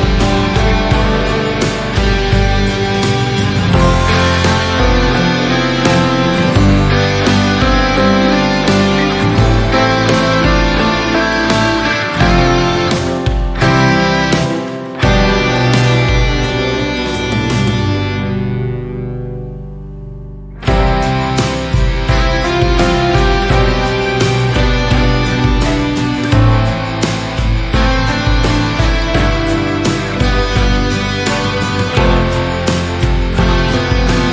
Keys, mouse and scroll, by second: 0.1 a, 0.2 a, 0.9 s, 6.7-8.3 middle drag, 8.3 KP_1, 9.0 scroll up 1, 9.5 alt+s, 11.1 scroll down 1, 11.2-13.2 middle drag, 13.2 alt+z, 14.4 KP_3, 15.4 s, 17.9 alt+z, 18.2 middle click, 19.1 Tab, 19.3 click, 19.5 scroll down 4, 19.8-20.7 middle drag, 21.2 click, 21.8 KP_3, 22.6 KP_1, 23.2 scroll up 4, 23.7-24.1 shift+middle drag, 24.1 scroll down 2, 24.4 middle click, 25.1 KP_1, 25.8 scroll down 1, 26.2-28.2 shift+middle drag, 28.7-30.2 middle drag, 30.2 click, 31.4 shift+a.